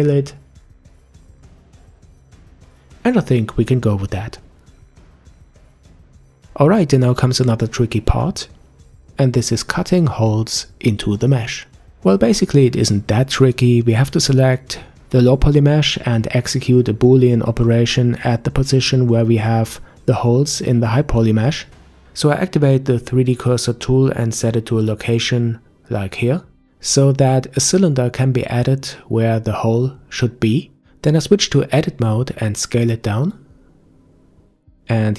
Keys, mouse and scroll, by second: 3.2 s, 9.7-10.5 scroll down 3, 10.5 Tab, 11.7-15.3 middle drag, 15.3 scroll up 2, 21.5 click, 23.9 click, 24.4-24.9 scroll down 1, 27.7 shift+a, 30.8 Tab, 31.3 s.